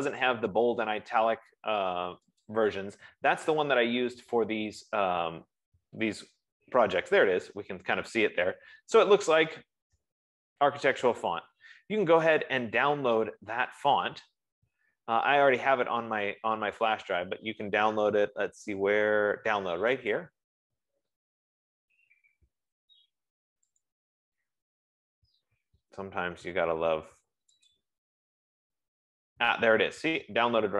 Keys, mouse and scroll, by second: 2.8 click, 13.5-14.0 scroll, 15.0-15.6 scroll down 2, 16.4 scroll, 17.3-18.0 scroll, 20.6 click, 24.1 click, 28.0 click.